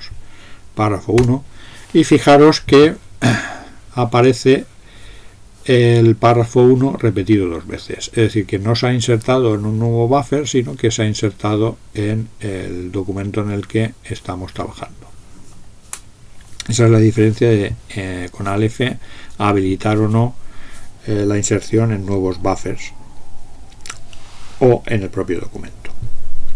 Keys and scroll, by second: 1.2 Tab.